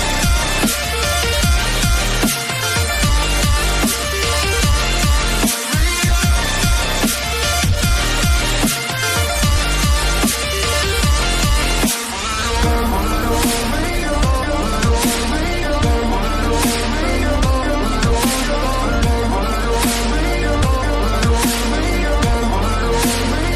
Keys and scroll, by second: 1.7 shift+Up, 2.2 Caps_Lock, 9.7 Caps_Lock, 11.8 Delete, 23.2 Delete.